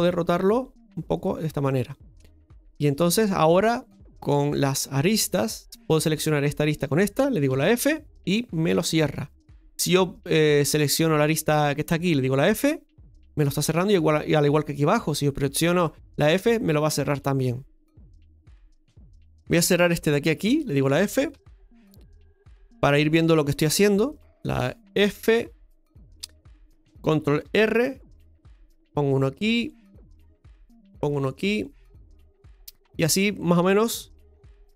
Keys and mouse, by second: 2.7 right click, 4.4 click, 5.4 right click, 5.8 right click, 6.6 shift+right click, 7.5 f, 9.3 right click, 12.6 f, 13.9 right click, 16.0 f, 19.5 right click, 20.4 shift+right click, 21.3 f, 24.1 right click, 25.1 f, 27.8 ctrl+r, 33.0 right click, 34.3 shift+right click.